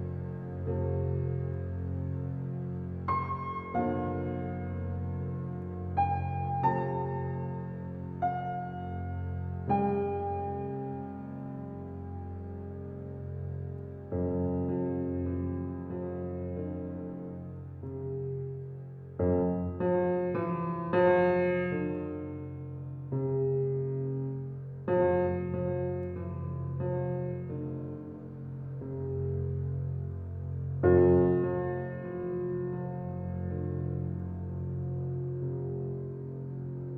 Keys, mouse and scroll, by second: 0.4 8, 1.0 shift+', 8.2 scroll up 1, 10.4 click, 10.8-11.1 scroll up 1, 15.5-16.4 scroll down 1, 19.7 click, 20.2-21.1 scroll up 1, 21.5 click, 26.4-26.8 typing, 28.2 click, 28.7-29.2 scroll up 1, 29.4 click, 32.5 shift+', 33.2 Return, 33.6 scroll down 1, 34.7 click, 35.5 right click.